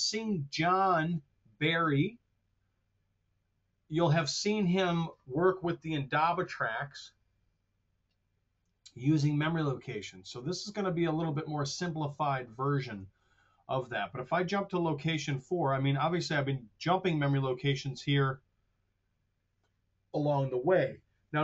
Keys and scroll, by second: 12.4 super+Tab.